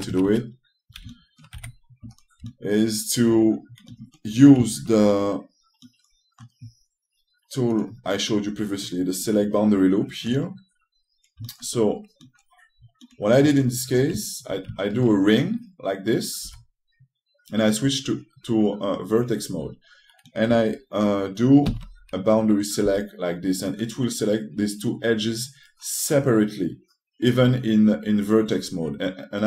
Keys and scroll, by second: 2.2 2, 17.1 3, 22.4 c, 23.5 s.